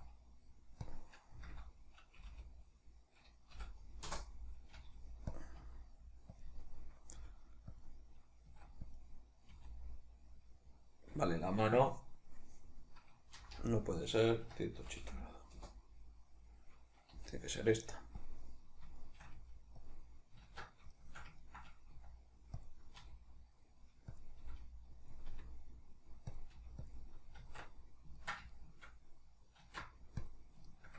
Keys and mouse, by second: 0.0 s, 1.0 click, 1.4 r, 4.2 Return, 4.8 g, 5.4 click, 5.6 s, 6.4 click, 6.6-7.8 shift+middle drag, 7.2 g, 7.8 click, 8.5 s, 9.0 click, 9.6 r, 10.5 click, 13.4 r, 15.6 Return, 17.2 g, 18.3 click, 19.0 shift+middle click, 19.4 g, 19.9 click, 20.4 alt+q, 21.0-22.0 shift+middle drag, 22.0 s, 22.7 click, 23.0 r, 24.2 click, 24.4 g, 25.1 click, 25.3 r, 26.3 click, 26.5 g, 26.9 click, 27.4 alt+q, 28.1-30.9 ctrl+middle drag, 29.6 alt+q.